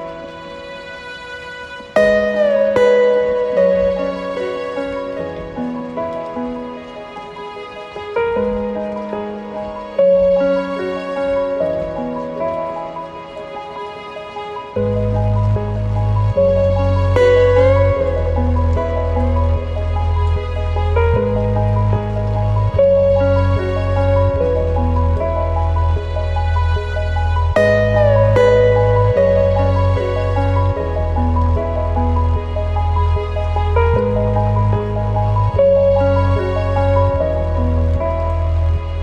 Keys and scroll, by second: 7.9 ctrl+t, 8.3 ctrl+space, 8.8 ctrl+alt+space, 20.7 ctrl+space, 26.0 ctrl+0, 33.2 ctrl+t, 36.5 ctrl+z.